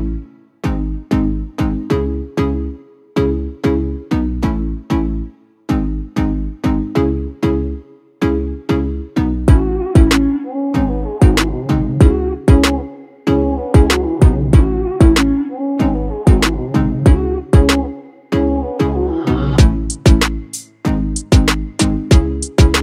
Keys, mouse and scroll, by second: 3.4-5.5 drag, 6.1 click, 8.9-9.2 click, 19.9-22.8 drag.